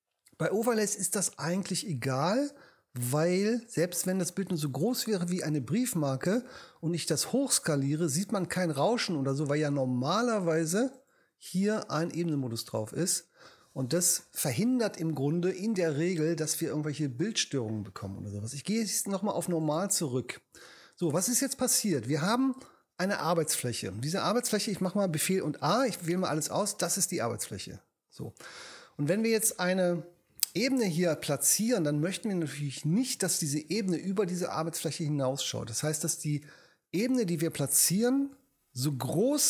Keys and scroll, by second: 25.2 super+a.